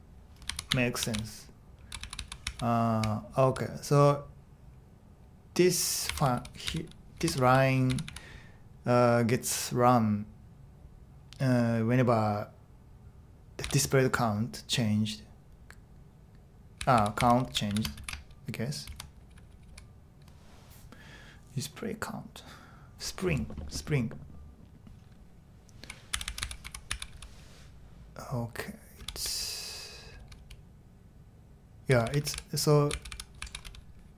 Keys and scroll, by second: 0.0-2.0 typing, 3.0-3.9 typing, 5.8-8.5 typing, 13.6 typing, 16.5-20.2 typing, 25.8-27.6 typing, 29.0-30.4 typing, 31.6-34.1 typing.